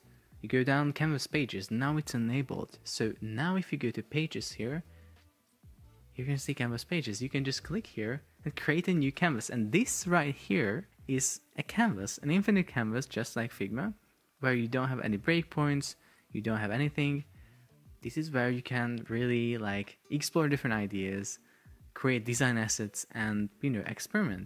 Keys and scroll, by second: 9.5 Return.